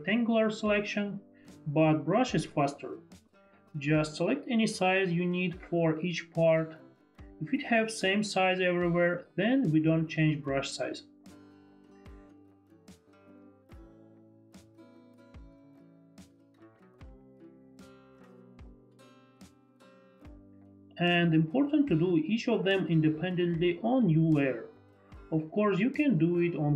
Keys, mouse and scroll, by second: 0.1 click, 2.6 ctrl+click, 3.9 ctrl+click, 4.8 ctrl+click, 5.4 ctrl+click, 5.6 ctrl+click, 6.2 ctrl+click, 12.2 ctrl+click, 14.5 ctrl+click, 18.0 click, 19.4 click, 20.6 click, 22.3 shift+click.